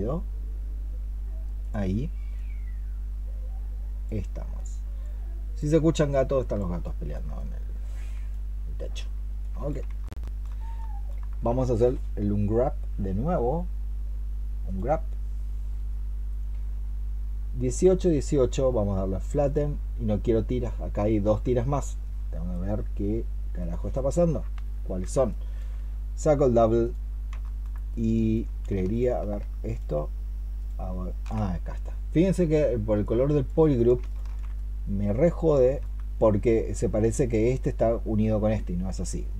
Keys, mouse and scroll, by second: 6.7 alt+click, 9.9 alt+click, 25.1 alt+click, 27.3 alt+click, 28.8 ctrl+shift+click, 33.9 ctrl+shift+click, 35.5 alt+click.